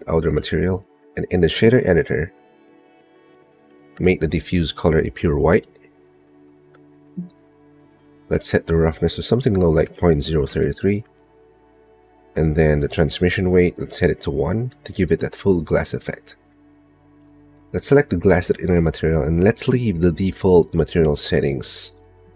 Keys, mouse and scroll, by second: 5.1 click, 9.4-11.4 drag, 11.1 KP_3, 14.4-15.5 drag, 16.2 click, 16.4 middle click, 16.6 click, 17.0 click, 17.0 middle click, 17.2 click, 17.6 click.